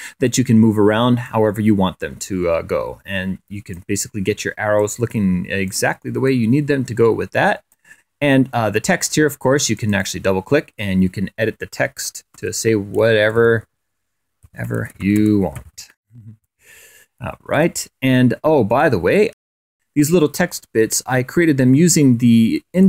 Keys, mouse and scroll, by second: 1.0-3.7 drag, 4.5 click, 5.4 click, 6.0-7.7 drag, 9.5 click, 11.8-16.1 typing, 17.3 click, 18.5-19.7 drag, 21.3-21.8 scroll up 2, 22.8 ctrl+a.